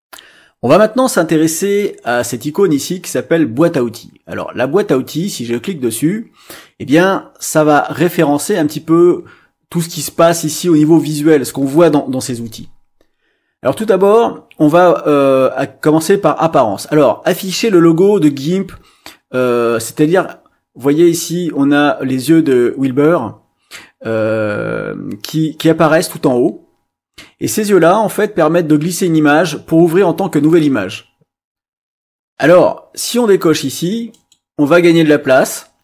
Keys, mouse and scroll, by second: 0.0 click, 5.1 click, 34.1 click.